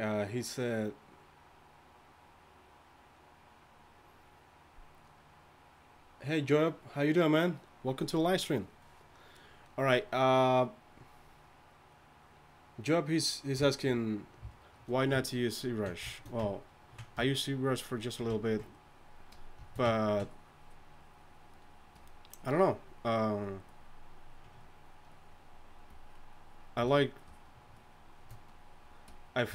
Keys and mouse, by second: 18.0-29.5 drag.